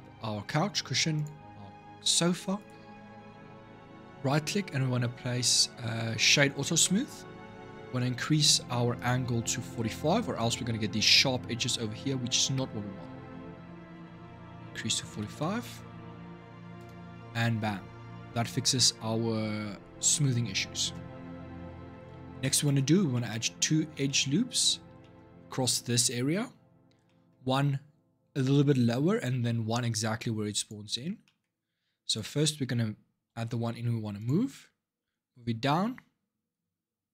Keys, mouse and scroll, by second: 0.9 shift+click, 2.4-5.5 right drag, 8.7-11.9 drag, 21.4 Tab, 21.7 middle click, 22.0 scroll up 3, 22.4-29.8 middle drag, 30.4 click, 31.0 shift+middle click, 31.3-31.8 scroll up 3, 31.8 click, 33.1 ctrl+r.